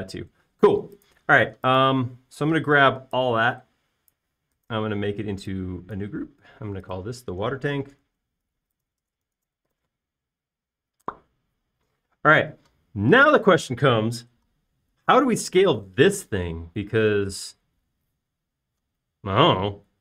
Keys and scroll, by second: 0.2 space, 2.6 typing, 8.7-11.4 typing, 12.2 Return.